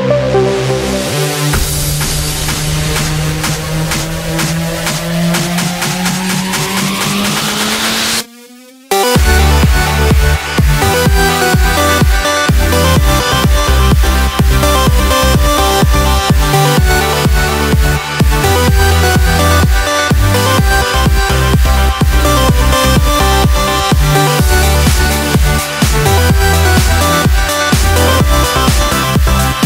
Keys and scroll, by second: 0.5 Delete, 2.2 Delete, 16.9-22.3 typing, 23.3 \, 24.9-26.5 typing, 25.2 Return.